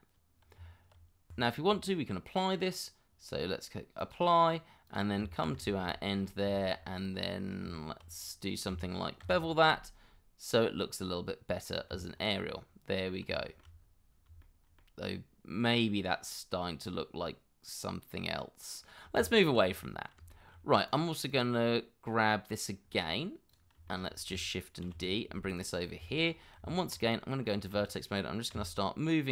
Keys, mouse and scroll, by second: 0.6 Tab, 1.3 Escape, 5.2 Tab, 5.7 shift+middle click, 5.9 scroll up 1, 6.5 shift+middle click, 6.8 scroll up 1, 7.2 middle click, 7.6 Tab, 9.2 ctrl+b, 10.0 scroll up 1, 11.0 scroll down 1, 11.9 Tab, 12.3 scroll down 1, 13.0 middle click, 13.3 shift+middle click, 13.8 scroll down 1, 14.4 shift+middle click, 18.1 middle click, 19.0 scroll down 1, 19.3 shift+middle click, 19.8 middle click, 20.3 shift+middle click, 21.3 double click, 21.6 middle click, 22.8 scroll down 1, 23.9 shift+middle click, 24.8 shift+d, 25.8 scroll up 1, 26.1 shift+middle click, 26.3 scroll up 1, 26.6 Tab, 28.5 g.